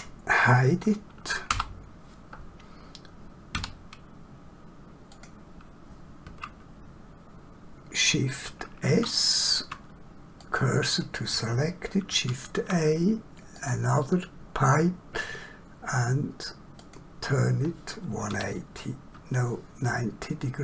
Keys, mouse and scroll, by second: 1.4 h, 3.6 1, 5.1 click, 8.9 shift+s, 10.3 click, 12.1 shift+a, 13.5 click, 16.8 click, 18.3 1.